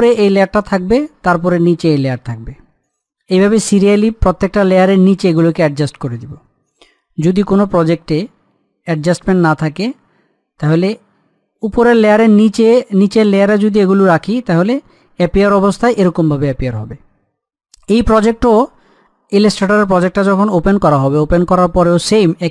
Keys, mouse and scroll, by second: 0.8 click, 7.6-10.6 middle drag, 10.6 click.